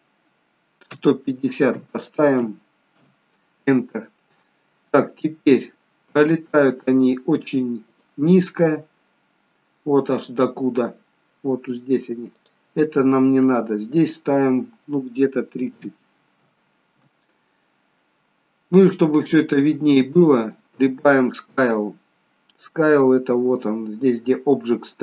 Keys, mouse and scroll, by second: 5.7 middle click, 7.9 click, 9.3-9.8 scroll down 2, 9.8 middle click, 10.9-12.4 scroll up 2, 12.4 click, 14.0 click, 18.9 middle click, 21.4-22.0 scroll down 3, 22.0-23.4 scroll down 3.